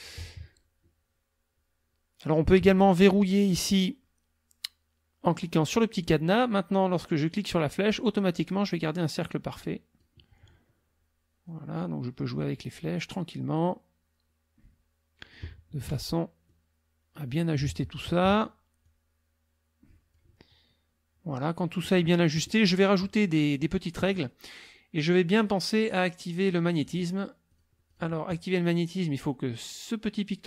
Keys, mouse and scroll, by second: 5.8 click, 7.3-10.2 drag, 11.5-12.6 drag, 13.6-15.5 drag, 16.5-17.7 drag, 18.8-20.3 drag, 26.4 click, 26.9 click, 27.5 click, 27.9 click.